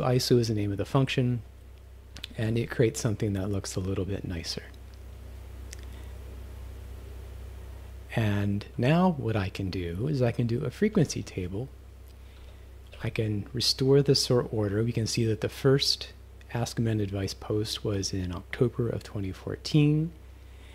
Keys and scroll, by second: 0.9 Return, 2.2 Left, 2.4 -, 11.0 shift+f, 13.0 [.